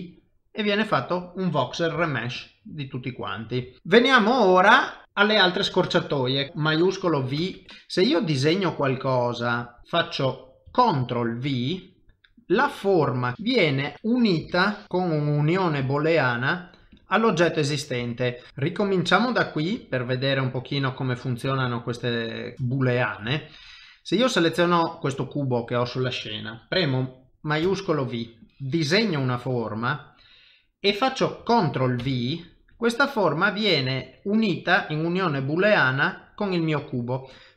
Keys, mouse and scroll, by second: 0.0 middle click, 1.9 g, 2.6 middle click, 3.7 shift+middle click, 6.5 shift+middle click, 7.4 shift+v, 7.7 click, 13.3 middle click, 13.3 KP_7, 13.9 middle click, 14.4 KP_Decimal, 14.8 ctrl+middle click, 15.9 shift+middle click, 16.4 middle click, 17.3 middle click, 18.2 shift+middle click, 18.5 click, 18.7 middle click, 19.8 shift+middle click, 20.3 middle click, 22.6 ctrl+middle click, 23.3 shift+middle click, 23.7 middle click, 27.6 shift+v, 28.4 click, 33.2 middle click, 34.0 click, 34.4 middle click.